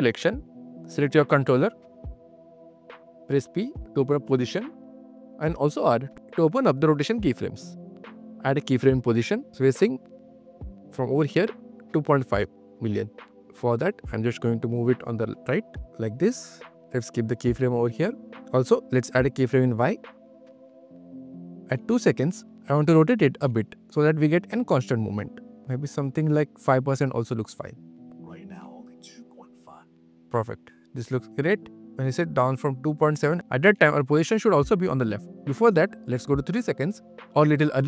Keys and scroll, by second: 3.5 p, 3.9 q, 5.2 shift+q, 5.7 shift+r, 6.1 q, 15.0 super+q, 15.0 super+z, 15.3 super+q, 28.0 space, 28.5 q, 29.8 space, 30.0 q.